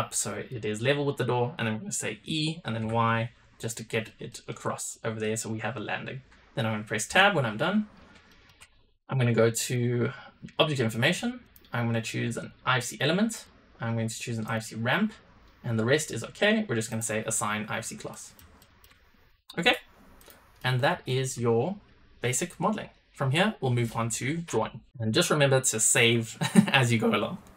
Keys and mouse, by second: 2.2 e, 4.2 middle click, 5.1 middle click, 7.0 Tab, 8.2 shift+middle click, 9.5 click, 11.5-12.5 drag, 13.4-14.5 drag, 16.8 click, 18.0 middle drag, 18.5 shift+middle drag, 19.5 n, 20.1 click, 20.5 middle click, 21.0 shift+middle click.